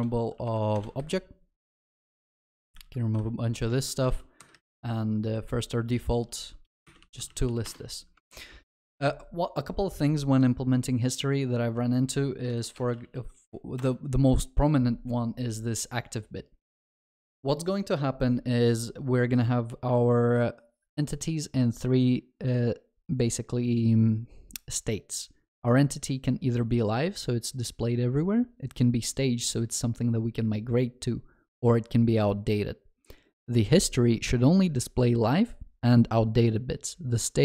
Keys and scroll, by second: 2.1 Return, 3.8 ctrl+alt+shift+l, 4.1 ctrl+s, 7.7 Return, 8.2 ctrl+s, 12.5 ctrl+shift+n.